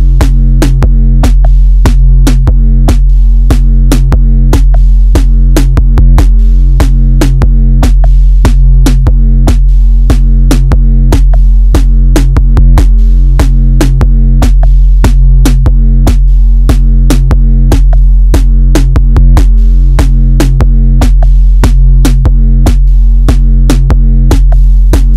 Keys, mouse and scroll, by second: 0.0 click, 0.7 KP_1, 1.1-1.5 scroll down 2, 1.5 Tab, 2.3 Tab, 2.8 alt+z, 3.4 click, 4.6 click, 7.3 r, 9.7-11.8 shift+middle drag, 11.8 KP_1, 12.0-12.4 scroll down 1, 12.4-13.4 shift+middle drag, 13.4-13.9 scroll up 3, 13.9-14.3 shift+middle drag, 14.3 scroll up 1, 14.6-15.8 middle drag, 15.8 Tab, 16.3-17.6 middle drag, 17.6 alt+z, 18.0-22.4 middle drag, 22.4 click, 23.0 click.